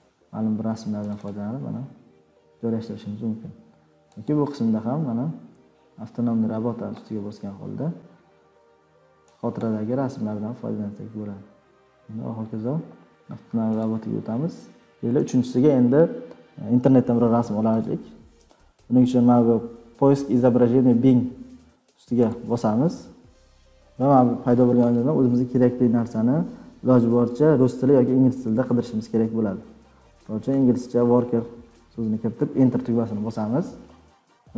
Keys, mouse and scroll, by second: 1.1 click, 1.2 click, 4.3 click, 6.3 click, 9.6 click, 12.5 click, 12.6 click, 13.8 click, 15.6 click, 17.8 click, 22.3 click, 24.5-25.7 drag, 29.7-31.8 typing, 32.3 Return.